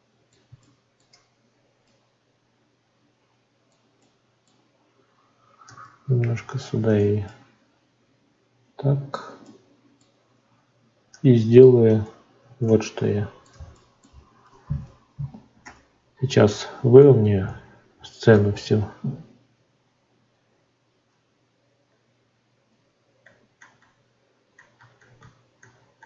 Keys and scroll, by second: 21.1 ctrl+3.